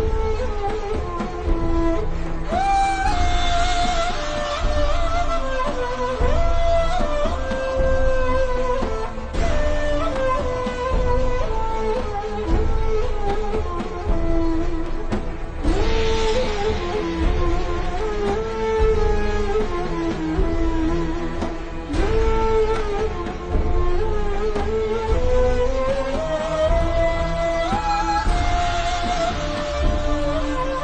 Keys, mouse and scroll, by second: 2.6 alt+shift+scroll down 1, 3.1-3.6 ctrl+scroll up 2, 4.0 click, 5.1-5.5 alt+shift+scroll up 2, 5.5 click, 7.1-7.7 scroll down 1, 7.7-8.0 scroll up 1, 20.6 ctrl+scroll up 1, 21.2 scroll up 1, 21.4 alt+shift+scroll down 2, 22.0 ctrl+scroll up 1, 22.7 alt+shift+scroll down 1, 24.1-24.6 alt+shift+scroll up 1, 26.9 alt+shift+scroll down 1.